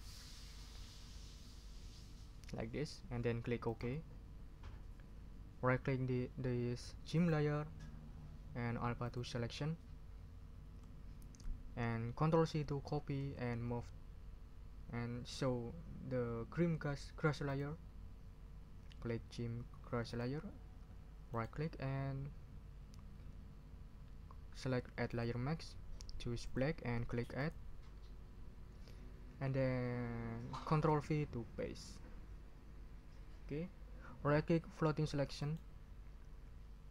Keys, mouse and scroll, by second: 3.6 click, 7.1 right click, 9.0 click, 13.2 ctrl+c, 17.5 click, 20.0 click, 21.3 right click, 25.0 click, 26.4 click, 27.4 click, 31.8 ctrl+v, 35.4 right click.